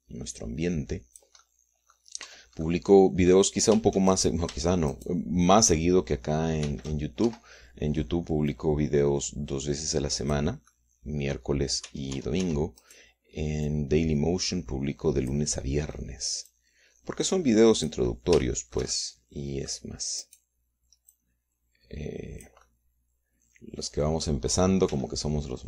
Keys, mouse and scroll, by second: 0.4-2.4 drag, 3.1-4.5 middle drag, 3.3 Tab, 5.1 shift+right click, 5.9 shift+right click, 7.7 shift+d, 8.3 shift+Escape, 9.5-11.6 drag, 11.7 middle click, 12.9 Tab, 13.9 click, 14.7-16.5 drag, 16.6 middle click, 17.5-19.1 drag, 19.5-20.9 shift+middle drag, 21.3 click, 22.2-23.7 drag, 24.5 click.